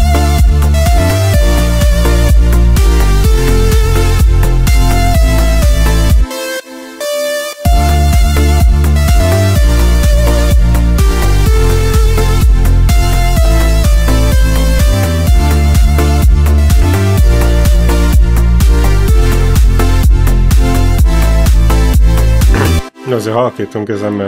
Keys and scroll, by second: 6.0 space, 7.5 space, 13.2 ctrl+l, 21.7 space.